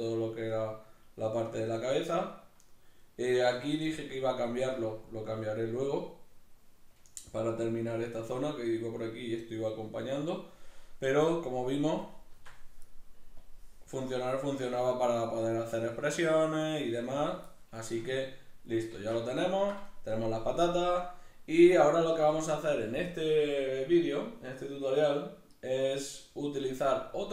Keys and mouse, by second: 13.4-17.8 drag, 17.8-27.3 shift+middle drag, 19.0 alt+q.